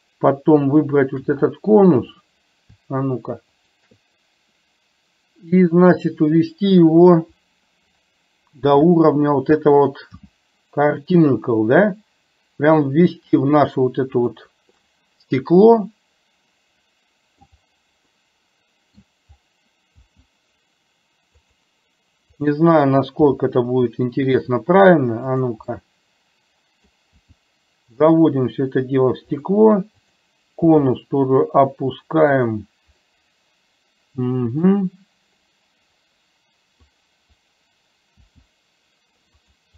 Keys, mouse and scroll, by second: 3.6 shift+click, 10.3 g, 14.9-17.4 middle drag, 18.1 scroll up 1, 18.3-19.1 middle drag, 20.1 g, 22.5 click, 23.3 g, 25.9-27.0 middle drag, 27.3 g, 30.0 click, 30.8 g, 33.1-34.8 middle drag, 37.0 click, 38.3 g.